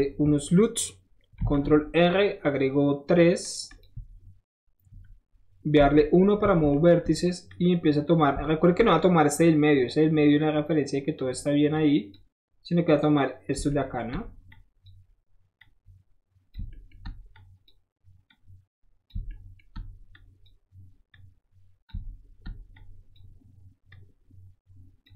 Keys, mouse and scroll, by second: 1.4 ctrl+r, 2.0-3.4 middle drag, 3.4 click, 3.5 middle click, 3.7 click, 3.8-5.9 middle drag, 6.2 middle click, 6.7 shift+middle click, 7.5 shift+click, 8.1 shift+middle click, 8.2 shift+middle click, 8.5 shift+middle click, 10.4 shift+click, 11.7 click, 12.9 click, 13.7 shift+middle click, 14.5 shift+click, 14.8 shift+middle click, 15.6 shift+click, 16.7 shift+middle drag, 17.3-17.7 shift+drag, 18.3-19.1 shift+drag, 19.3 shift+middle drag, 20.1-20.5 shift+drag, 20.1-20.5 shift+right drag, 21.1-21.9 shift+drag, 21.1-21.9 shift+right drag, 22.8-23.1 shift+drag, 22.8-23.1 shift+right drag, 23.9-25.1 shift+drag, 23.9-25.1 shift+right drag.